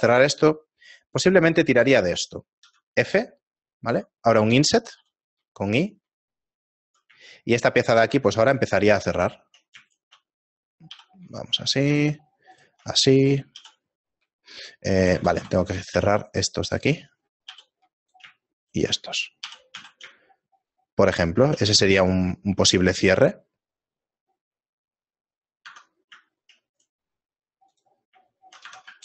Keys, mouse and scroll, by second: 5.0 f, 5.0 i, 7.3 shift+middle click, 8.1 ctrl+Tab, 9.0 right click, 9.4 shift+middle click, 10.0 shift+right click, 11.0 j, 11.8 right click, 12.5 shift+right click, 13.6 j, 15.4 ctrl+z, 15.8 right click, 16.7 shift+right click, 17.6 j, 18.1 right click, 18.7 shift+right click, 19.4 j, 19.8 a, 20.3 shift+middle click, 22.0 ctrl+middle click, 23.4 shift+middle click, 25.8 Tab, 26.3 shift+middle click, 26.8 right click, 27.8 click, 28.3 shift+middle click, 28.9 Tab.